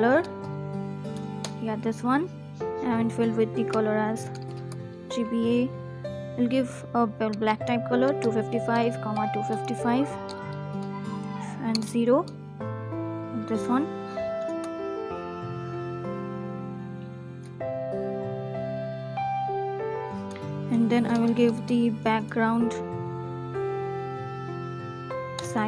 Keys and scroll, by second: 0.2 Down, 0.3 Down, 0.4 Down, 0.5 Down, 0.6 Down, 10.4 Right, 10.8 Left, 10.9 Left, 11.0 Left, 11.4 BackSpace, 12.4 Right, 14.3 ctrl+s, 20.0 BackSpace, 23.2 Down, 23.4 Down, 23.6 Down, 23.8 Return, 25.2 Return.